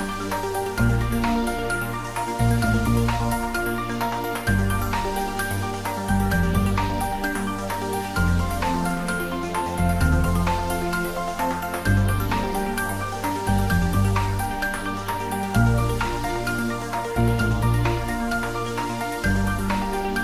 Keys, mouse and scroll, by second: 3.2 r, 9.1 Up, 15.0 Up, 17.0 click.